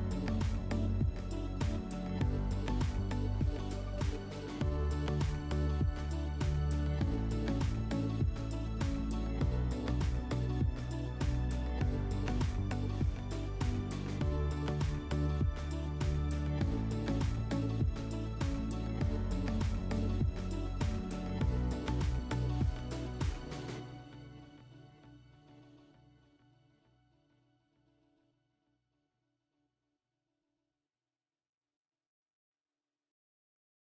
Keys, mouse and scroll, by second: 6.3 click, 6.4 click, 7.1-9.9 typing, 16.0-18.0 drag, 20.3-22.4 middle drag, 25.3-26.4 drag, 26.4 typing, 26.8 Return, 27.8 typing, 28.2 Return, 30.0 typing, 30.4 Return.